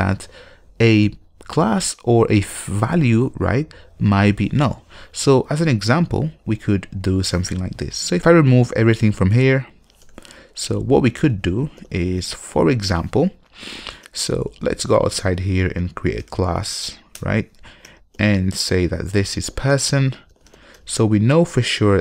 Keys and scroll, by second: 12.0 super+y, 17.3 Return.